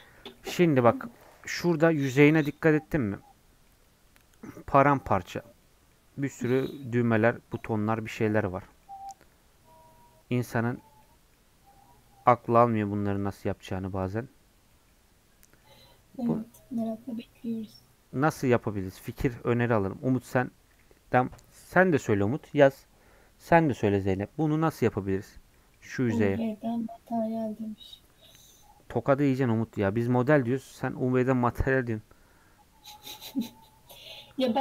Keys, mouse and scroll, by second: 0.1-22.1 middle drag, 22.1-25.4 drag, 25.4 scroll down 2, 25.6 middle click, 25.9 click, 26.2-34.6 middle drag.